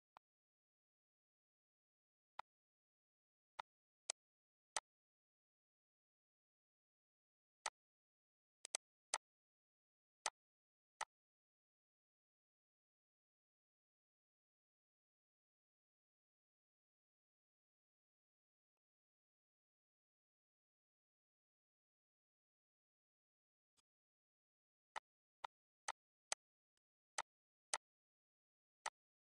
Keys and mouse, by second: 2.2 click, 3.3 click, 4.5 click, 7.4 click, 8.3 click, 10.0 click, 10.8 click, 18.5 click, 20.7 4, 21.4 0, 22.7 ctrl+d, 23.5 click, 24.5 ctrl+d, 24.7 click, 25.0 ctrl+d, 25.2 click, 25.6 click, 26.1 click, 26.4 ctrl+d, 26.5 click, 26.7 ctrl+d, 27.0 click, 27.4 ctrl+d, 27.5 click, 28.6 click.